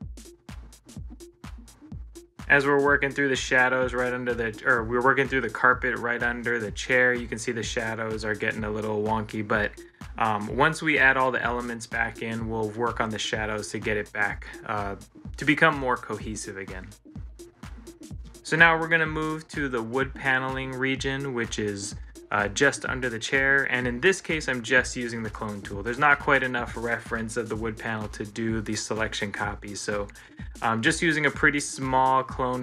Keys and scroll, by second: 10.1 ctrl+s, 31.3 ctrl+z.